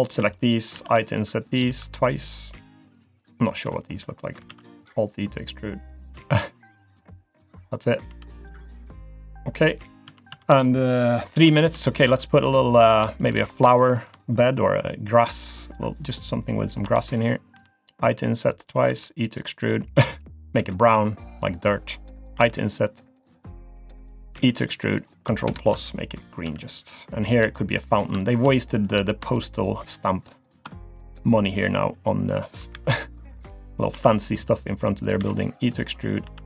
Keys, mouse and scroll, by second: 0.7 i, 4.5 alt+e, 8.1 g, 9.1 click, 9.4-10.0 scroll down 2, 9.7 middle click, 10.1 Tab, 10.3 Tab, 11.3 scroll down 1, 12.1 Tab, 12.4 Tab, 12.7 click, 13.1 shift+click, 13.5-13.8 scroll up 3, 13.8 shift+middle click, 15.2 e, 18.9 e, 20.6 g, 22.4 i, 24.4 e, 25.5 ctrl+KP_Add, 26.5 g, 27.8 click, 28.1 click, 29.0 click, 29.3 shift+click, 29.8 click, 30.0 click, 30.7 shift+middle click, 32.7 e, 33.9 i, 35.2 e, 36.3 i.